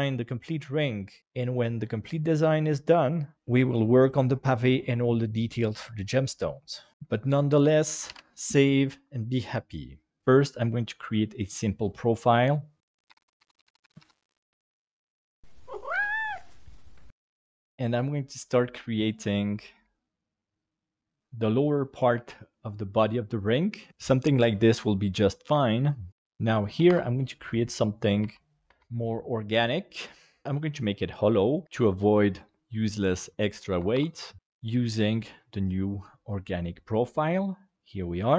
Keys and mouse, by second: 8.1 ctrl+s, 10.3-11.9 drag, 20.4 click, 21.2 g, 21.8 right click, 22.1 g, 23.8 right click, 26.4 click, 27.4 right click, 27.9 right click, 28.2 g, 28.7 v, 29.9-31.2 right drag, 31.2 g, 31.4 right click, 31.6 e, 33.5 click.